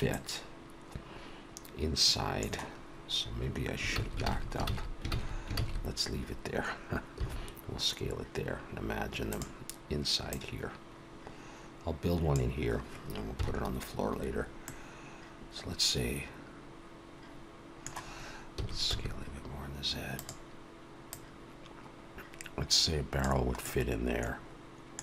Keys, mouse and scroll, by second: 0.1 middle click, 3.9 ctrl+z, 4.4 ctrl+z, 4.9 ctrl+z, 5.4 ctrl+z, 5.5 ctrl+z, 7.1 s, 10.8 click, 14.1 KP_1, 14.2-14.5 scroll up 1, 14.6 middle click, 18.5 s, 21.3 click, 23.6 middle click.